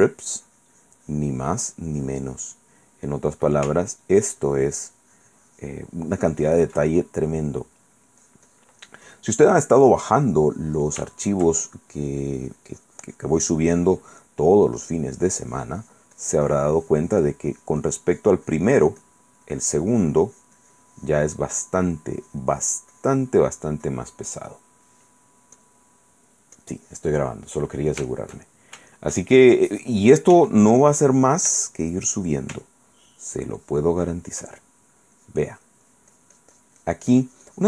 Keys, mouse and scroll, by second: 1.7 click, 3.1 middle click, 3.9-7.0 ctrl+drag, 7.4 ctrl+middle click, 8.4-9.5 drag, 9.6-11.1 drag, 11.3 shift+click, 11.8-14.8 shift+drag, 14.4 middle click, 15.0 click, 19.6-21.9 drag, 22.4-23.7 drag, 24.0 click, 25.8 click, 26.8 click, 27.7 click, 28.3-29.9 shift+drag, 30.5 f, 31.0-32.1 drag, 33.3-34.7 ctrl+drag, 35.4 click.